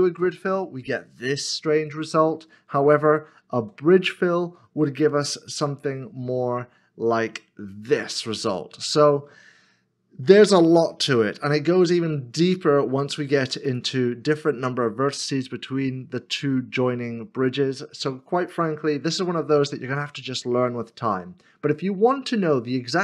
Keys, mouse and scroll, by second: 1.2 middle click, 3.4 ctrl+z, 5.7 ctrl+e, 8.1 middle click, 12.0 ctrl+z, 12.0 middle click, 20.0 middle click.